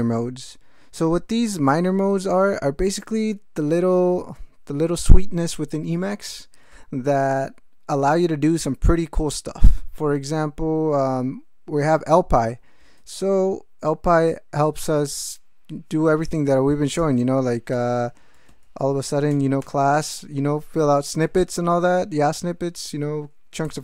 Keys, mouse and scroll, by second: 13.0 alt+shift+., 17.0 Return, 17.2-19.1 typing, 19.3 Return, 19.6 Tab, 23.3-23.8 typing.